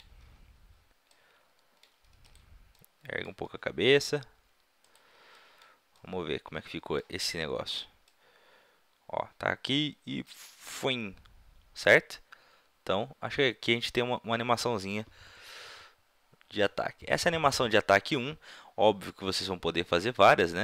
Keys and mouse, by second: 1.4-2.3 middle drag, 2.3-4.1 drag, 3.5 r, 4.1 middle click, 4.9-6.0 drag, 8.0-10.0 drag.